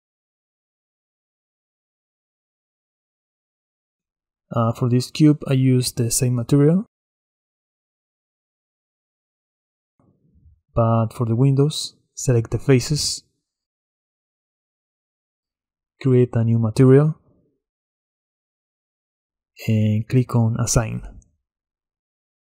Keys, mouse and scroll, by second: 0.1-2.3 middle drag, 2.3 click, 5.4 shift+click, 6.7-8.3 drag, 8.3-9.1 shift+middle drag, 9.1-9.6 scroll up 3, 9.6-10.5 middle drag, 10.5 Tab, 11.8-14.9 drag, 16.9-19.4 drag, 19.6-22.5 drag.